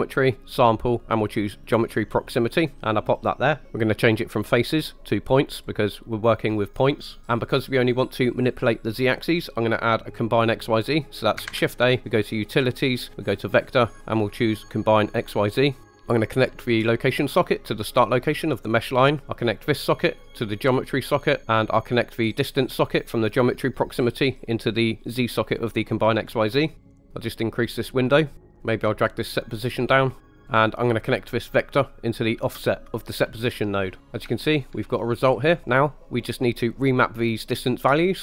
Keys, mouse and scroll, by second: 3.2 click, 4.4-5.6 drag, 11.5 shift+a, 15.8 click, 16.8-18.4 drag, 19.5-20.7 drag, 22.4-25.3 drag, 27.1 click, 28.1 middle click, 28.5 scroll down 1, 28.6 right click, 28.7-30.2 drag, 30.2 middle click, 31.2 middle click, 31.4-33.2 drag, 34.0 scroll down 8, 34.1 scroll up 4, 34.3-34.7 shift+middle drag, 34.9 middle click.